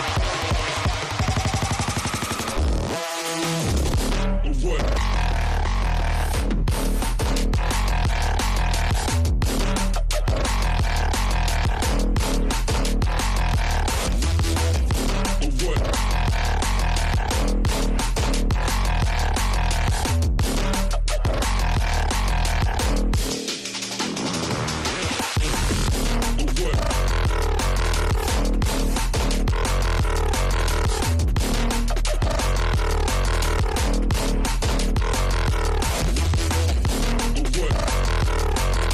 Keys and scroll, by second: 11.7 space, 12.1 F3, 12.5 F2, 15.6 F3, 15.9 F2, 17.7 F3, 18.1 F2, 19.0 ctrl+g, 22.3 ctrl+g, 23.0 c, 23.5 e, 23.9 Escape, 26.0 Escape, 30.0 space, 31.4 ctrl+z, 34.6 space, 35.2 space, 38.5 space.